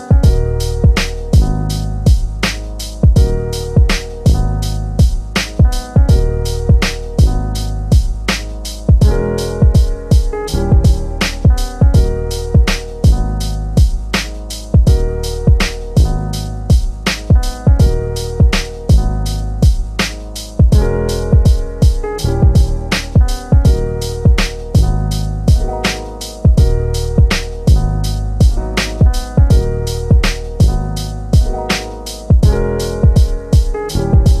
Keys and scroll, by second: 0.7 l, 1.3 3, 32.8 BackSpace.